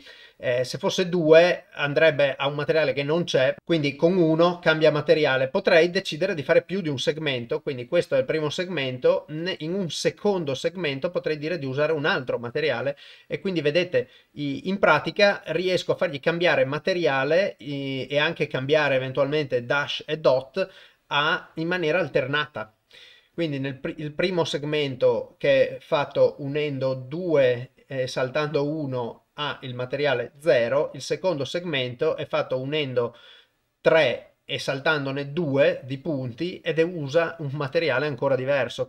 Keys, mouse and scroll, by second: 1.2 click, 7.4 click, 17.0 click.